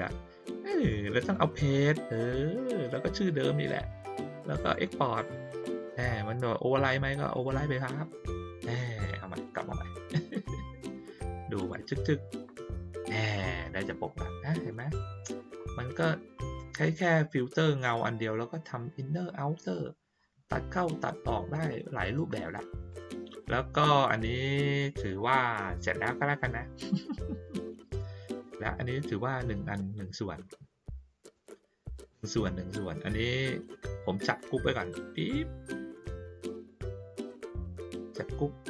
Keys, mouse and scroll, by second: 1.2 click, 4.7 click, 7.3 click, 9.5 click, 11.5 click, 11.8 click, 21.5 click, 22.9 click, 28.1 ctrl+middle click, 28.1-28.5 ctrl+scroll down 2, 31.3 click, 31.9-32.7 drag, 34.3-36.6 drag.